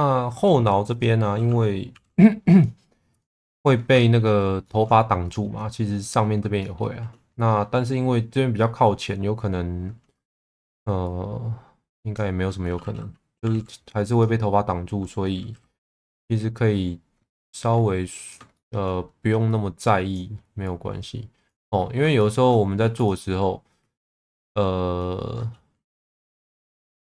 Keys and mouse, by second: 1.0 click, 1.9 g, 2.0 b, 3.6 middle click, 4.6 shift+middle click, 5.2 click, 6.6 shift+middle click, 10.3 shift+middle click, 13.4 g, 13.5 b, 15.5 z, 16.0 click, 18.2 click, 18.5 shift+middle click, 20.6 click, 22.2 shift+middle click, 22.8 2, 26.2 g, 26.3 b.